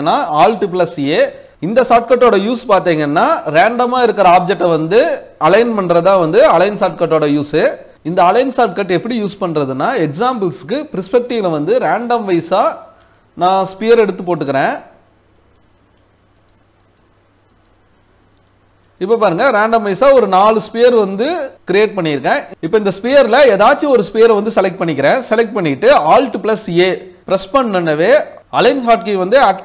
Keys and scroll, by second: 0.0 alt+a.